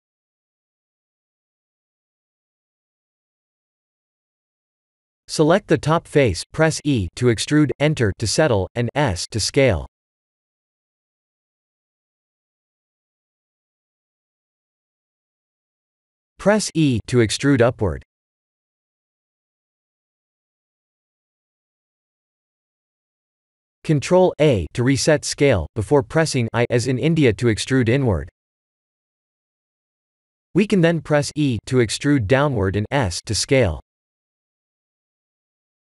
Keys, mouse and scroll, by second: 1.1 KP_1, 1.5 shift+z, 3.0 shift+z, 4.1 middle click, 4.4 middle click, 4.5 Tab, 4.8 3, 5.1 click, 5.6 KP_1, 6.1 shift+z, 6.9 s, 9.1 click, 9.4 middle click, 10.0 middle click, 10.4 click, 10.9 middle click, 11.2 middle click, 11.3 shift+z, 11.7 click, 12.5 KP_1, 13.6 e, 14.1 s, 19.2 middle click, 19.2 middle click, 22.5 middle click, 23.8 Tab, 24.5 ctrl+a, 26.0 Tab, 27.3 i, 31.6 middle click, 32.4 e.